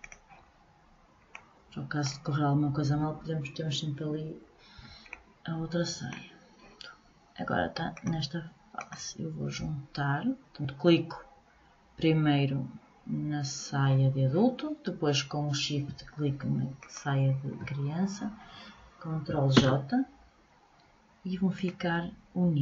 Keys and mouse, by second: 7.5-9.6 drag, 16.3-18.2 drag, 19.1 ctrl+j.